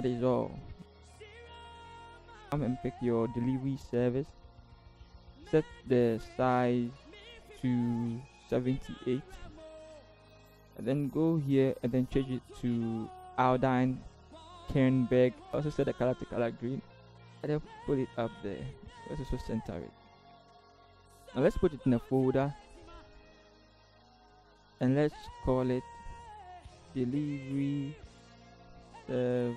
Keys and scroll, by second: 0.4 ctrl+t, 1.8 Return, 1.9 ctrl+h, 2.3 Left, 2.4 Return, 4.6 ctrl+c, 5.0 ctrl+v, 8.8 typing, 9.3 Return, 17.1 v, 19.7 ctrl+t, 20.3 ctrl+shift+t, 20.5 Left, 20.6 Down, 22.1 ctrl+g, 26.5-29.5 typing.